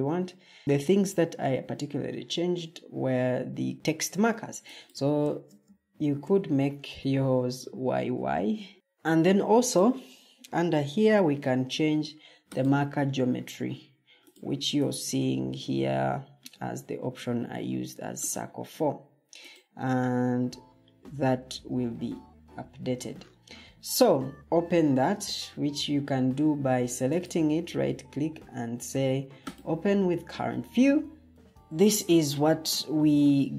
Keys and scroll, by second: 5.9 y, 22.0 Escape.